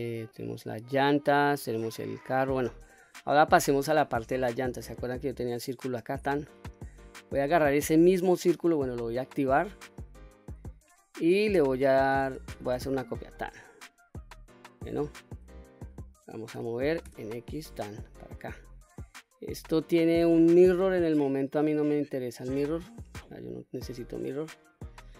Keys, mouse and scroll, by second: 0.2-1.1 middle drag, 1.6-2.8 middle drag, 3.1-3.5 middle drag, 5.7 click, 6.5 click, 7.5 click, 8.8 click, 9.7 click, 12.0 shift+d, 13.1 right click, 14.1-14.7 middle drag, 16.4 g, 16.9 x, 18.3 click, 19.4-20.0 middle drag, 20.3-21.0 scroll down 1, 21.0 middle click, 21.0-21.5 scroll down 1, 22.8 click, 23.8-24.2 middle drag.